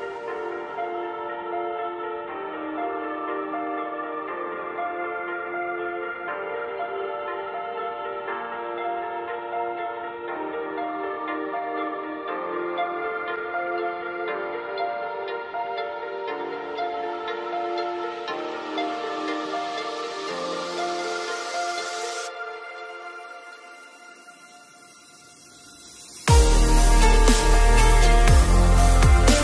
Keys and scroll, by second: 13.4 ctrl+z.